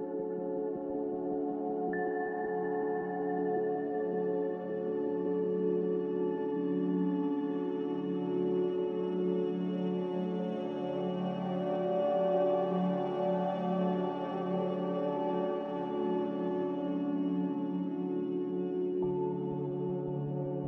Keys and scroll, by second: 0.8 z, 5.9 ctrl+z, 8.3 a.